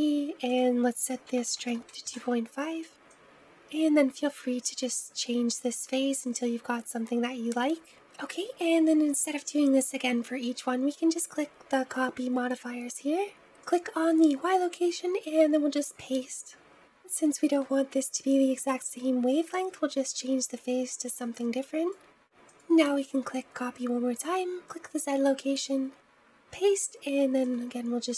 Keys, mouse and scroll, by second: 13.4-21.2 drag, 21.3-28.1 drag.